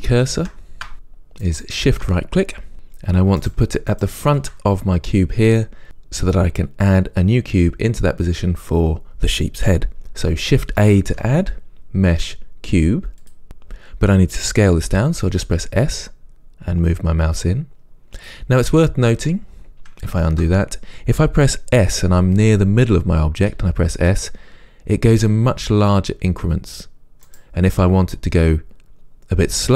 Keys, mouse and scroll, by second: 0.9-3.6 shift+right drag, 4.0-13.4 shift+right drag, 13.4 shift+a, 15.6 s, 18.4 click, 20.4 ctrl+z, 23.7 s, 27.5 right click.